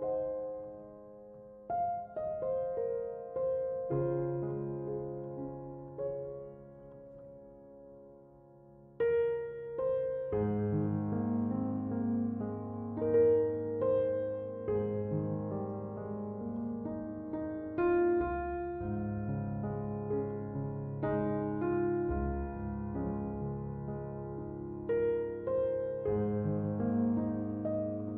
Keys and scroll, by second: 27.4 1, 27.7 Return.